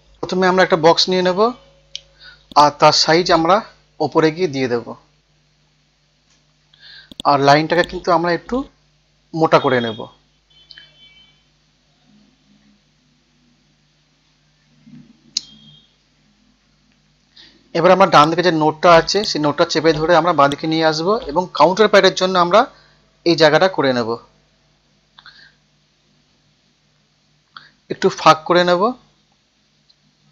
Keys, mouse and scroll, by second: 3.7-5.3 typing, 4.7 Tab, 7.1-10.1 drag, 10.3 F12, 11.2 Tab, 12.5 KP_2, 14.4 F12, 14.7 Tab, 15.1 KP_3, 15.5 Tab, 18.2 click, 19.2 right click, 20.4 click, 21.5 KP_6, 21.7 KP_0, 23.3 scroll up 1, 30.2 F12.